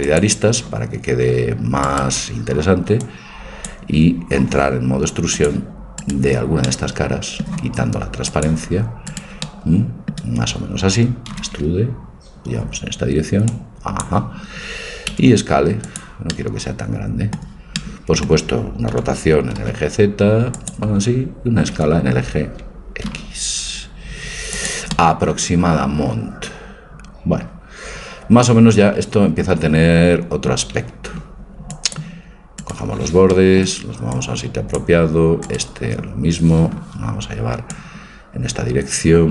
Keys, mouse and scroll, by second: 0.2-2.0 drag, 2.0-3.8 right drag, 3.0-4.9 drag, 5.4 click, 6.0-8.3 middle drag, 8.3-10.6 drag, 9.1-11.0 right drag, 9.5-11.0 middle drag, 11.3 e, 13.5-15.2 drag, 13.5 e, 15.2 s, 15.3 click, 16.3-18.6 middle drag, 18.9 r, 21.7 s, 25.3 middle click, 30.3 middle click, 31.8-33.1 drag, 32.6 right click, 34.6 click, 36.0-37.3 right drag, 37.6-39.3 drag.